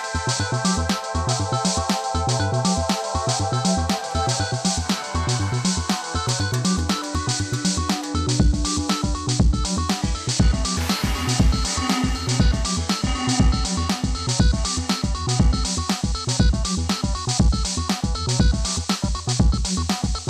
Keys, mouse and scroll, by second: 0.0-4.4 drag, 4.4 Return, 5.1 scroll down 1, 6.6 click, 7.7 ctrl+z, 8.2-11.5 drag, 13.4 right click, 14.9 click, 16.4-17.4 typing, 17.7 click.